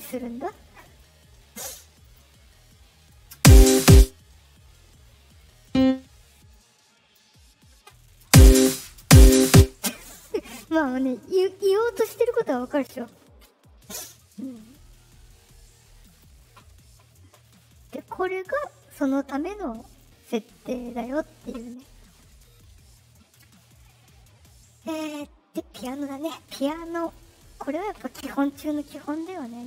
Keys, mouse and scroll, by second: 0.0 right click, 2.0 click, 2.4 right click, 3.3 space, 3.8 space, 4.2-5.3 right drag, 5.5 click, 6.4 click, 8.2 space, 8.6 space, 8.9 space, 9.4 space, 14.5 right click, 16.0 click, 17.7 click, 19.8 click, 26.0 middle click, 26.9 click.